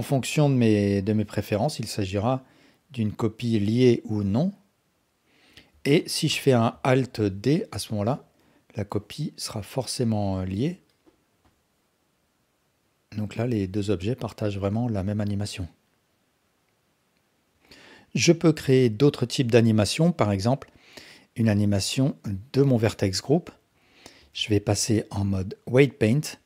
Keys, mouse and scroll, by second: 0.3-5.3 drag, 5.7 x, 7.2 alt+d, 8.1-8.7 drag, 8.9-9.5 drag, 10.5 g, 11.4-16.6 drag, 24.4 ctrl+Tab.